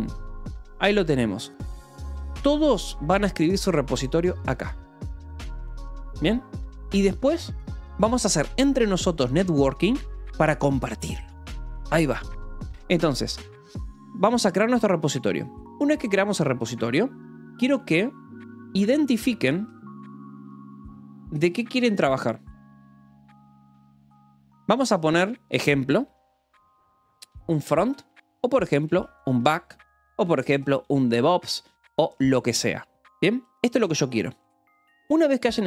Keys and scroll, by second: 14.7 BackSpace, 19.0-25.8 typing, 27.0-34.6 typing.